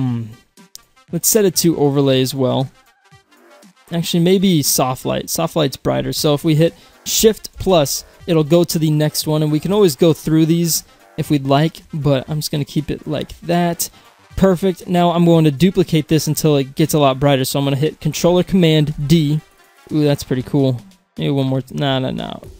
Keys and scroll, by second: 7.6 shift+=, 19.0 ctrl+d.